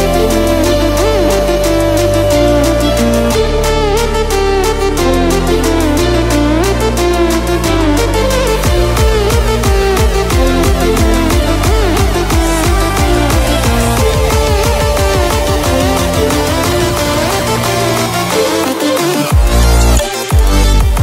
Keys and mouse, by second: 12.5 b, 13.6-15.3 typing, 19.6 alt+click.